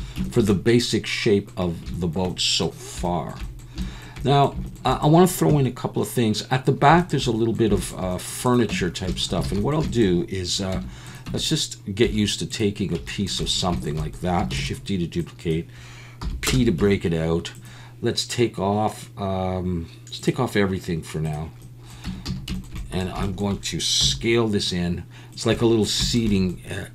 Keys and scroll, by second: 8.7 Tab, 9.4 alt+a, 10.7 Tab, 11.3 Tab, 12.0 2, 14.5 shift+d, 16.2 p, 16.8 Tab, 22.1 Tab, 22.3 a, 24.0 s.